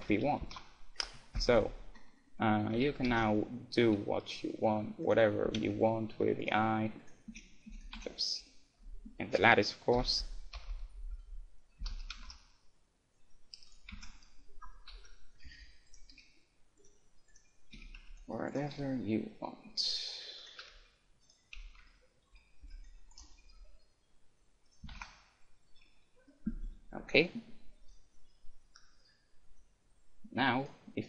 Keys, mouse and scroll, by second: 0.6 ctrl+z, 1.1 KP_1, 1.6 a, 1.9-4.2 middle drag, 2.7 a, 3.0 s, 5.5 a, 5.6 Tab, 6.5-9.1 right drag, 7.3 Tab, 7.7 Tab, 7.9 Tab, 8.2-9.9 middle drag, 8.9 a, 10.1 KP_7, 10.6-11.3 KP_6, 12.2 ctrl+alt+shift+s, 13.9 click, 13.9 a, 13.9 Tab, 14.1 middle click, 14.7 click, 14.9 KP_1, 15.6 Tab, 15.6 middle click, 15.9-18.6 right drag, 16.2 g, 17.7 a, 18.0 c, 18.9 g, 19.3-20.4 drag, 20.5-26.6 drag, 20.6-23.4 typing, 21.9-23.8 middle drag, 24.8 a, 24.9 Tab, 25.9-28.1 middle drag, 26.7 a, 30.6-31.0 right drag.